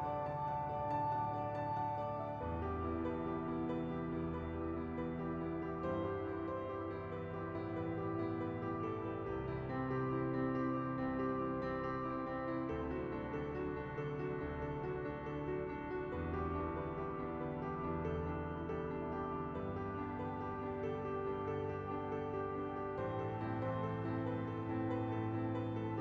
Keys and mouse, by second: 0.2 middle click, 0.8 middle click, 1.1 middle click, 1.4 space, 2.2 space, 3.2 space, 4.8 space, 5.4 middle click, 6.8 middle click, 7.3 KP_7, 7.8 shift+middle click, 8.6 shift+d, 9.7 shift+click, 10.2 shift+click, 13.6-14.7 drag, 15.8 shift+d, 17.4 click, 17.7 shift+d, 18.1 click, 19.0 click, 19.0 right click, 22.3 click, 23.6 click, 24.2 middle click, 24.6 space, 25.7 KP_1, 25.9 space.